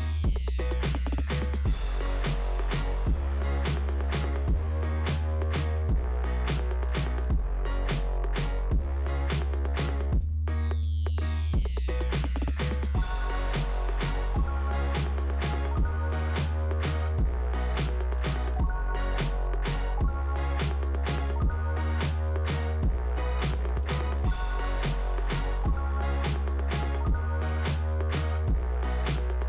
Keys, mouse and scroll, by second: 2.9-3.6 scroll up 1, 3.9 click, 6.2 click, 7.3 click, 7.4 click, 9.2 click, 10.2 click, 11.5 right click, 12.2 click, 15.7 click, 16.2 click, 17.3 click, 17.4 click, 18.5 click, 19.6 middle click, 22.4 scroll up 2, 22.8 click, 24.4 click, 24.9 click, 26.4 click, 26.6 click, 27.7 middle click.